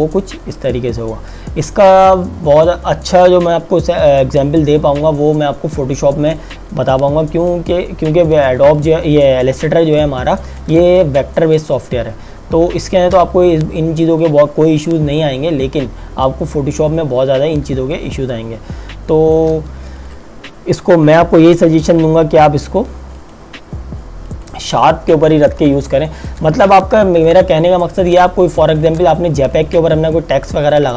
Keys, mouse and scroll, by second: 5.3 click, 8.7 space, 8.8 click, 9.2 space, 9.6 space, 11.6 click, 12.2 space, 17.9 click, 18.3 space, 20.0 click, 26.1 space, 26.7 KP_Subtract, 27.8 click, 28.7 space, 29.5 click.